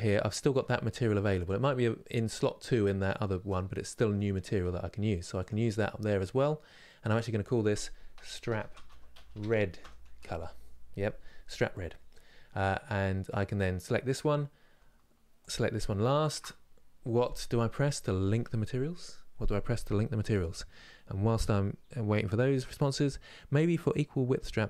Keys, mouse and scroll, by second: 0.9-5.2 drag, 13.0 click.